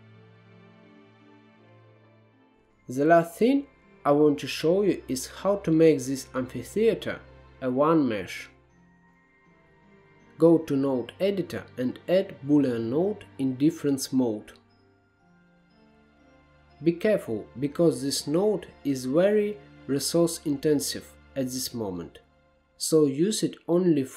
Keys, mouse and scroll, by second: 0.2-0.5 scroll up 2, 0.5 scroll down 2, 0.8-1.8 drag, 2.0 middle click, 2.1 ctrl+z, 2.3-5.4 shift+middle drag, 5.4 click, 6.0-6.4 drag, 6.4 middle click, 7.0 click, 7.5 shift+a, 22.0-22.6 scroll up 4, 22.6-23.0 scroll down 1, 23.0-24.1 middle drag.